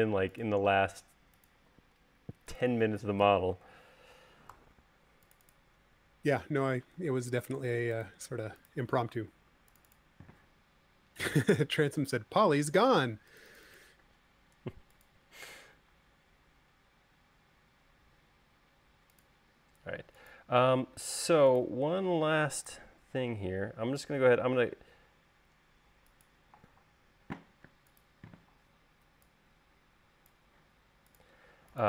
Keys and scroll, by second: 0.3 space, 4.8 super+c, 7.3 super+z, 9.6 super+x, 22.4 m, 28.1 space.